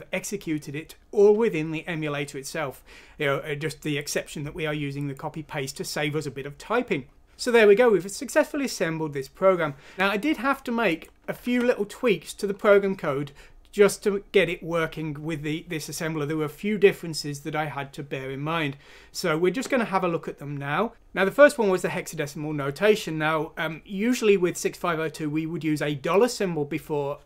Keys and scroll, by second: 11.5 alt+Tab.